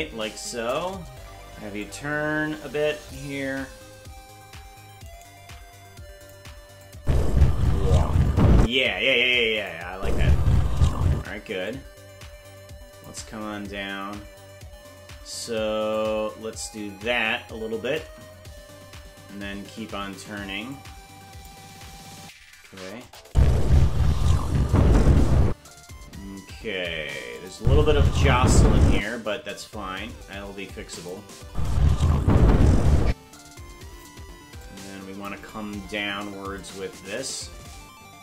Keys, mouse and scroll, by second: 1.8-3.2 drag, 5.0 right click, 5.4 g, 6.8 click, 6.9 space, 8.6 space, 9.6 click, 9.9 space, 11.1 space, 11.7-13.1 drag, 15.9-18.0 shift+drag, 20.7 click, 23.0 click, 23.2 space, 26.0-26.4 scroll up 5, 27.4 click, 27.5 space, 31.0 click, 31.4 space, 33.1 space, 34.6 click, 36.6-38.2 shift+drag.